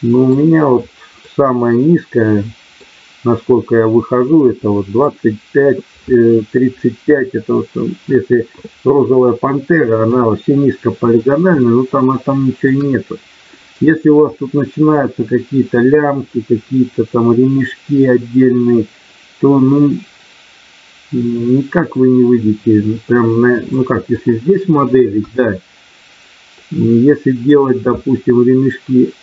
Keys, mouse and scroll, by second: 1.2-2.8 middle drag, 4.2 middle click, 10.0 KP_1, 11.6 shift+middle click, 23.7 middle click, 25.2 KP_1.